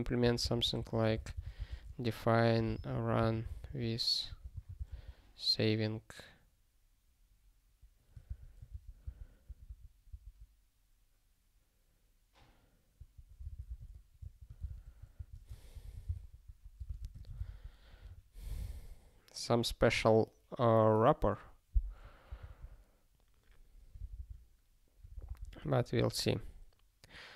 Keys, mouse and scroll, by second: 0.2 ctrl+p, 0.4 Return, 0.6-5.3 typing, 8.2 Return, 8.7 ctrl+e, 9.0 Return, 9.5 ctrl+p, 13.0 -, 14.7 ctrl+s, 15.1 ctrl+n, 15.7 alt+^, 16.1 ctrl+s, 16.4 ctrl+a, 16.8 ctrl+space, 16.9 ctrl+e, 17.1 alt+;, 17.4 ctrl+s, 24.0 super+b, 25.1 super+b, 25.6 super+b.